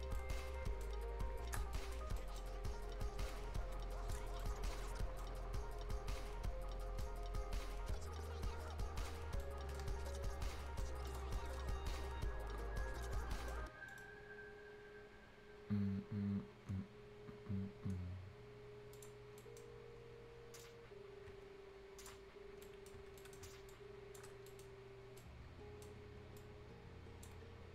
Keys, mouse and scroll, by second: 0.2 right click, 1.0-1.5 scroll up 1, 1.6-2.2 scroll down 2, 2.2 right click, 2.5-3.3 scroll up 1, 3.3 shift+click, 4.2 shift+scroll down 2, 4.4 right click, 5.4 scroll up 1, 7.0-9.2 right drag, 9.2 scroll up 1, 9.4 right click, 9.8 Escape, 9.9 scroll down 1, 10.1 right click, 10.9 scroll up 1, 11.1 click, 11.4 middle click, 13.3 right click, 13.7 scroll up 1, 13.9 middle click, 19.2 scroll down 1, 19.4 right click, 19.7 scroll up 1, 20.6-22.4 drag, 22.4 scroll down 1, 22.6 right click, 23.0 Escape, 23.2 right click, 23.7 ctrl+shift+click, 24.4-25.1 shift+scroll up 2, 25.1 shift+scroll down 1, 25.2 shift+right click, 26.0 shift+scroll up 1, 26.4 shift+click, 27.6 shift+scroll down 1.